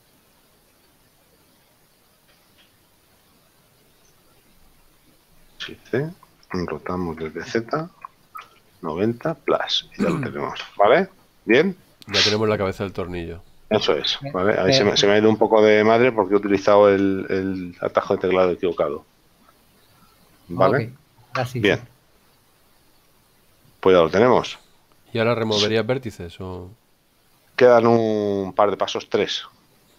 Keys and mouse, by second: 0.4 shift+right click, 2.5 a, 5.8 shift+d, 7.5 r, 8.1 z, 8.5 KP_9, 8.8 KP_0, 10.9 KP_7, 13.2 shift+middle click, 23.2 shift+middle click.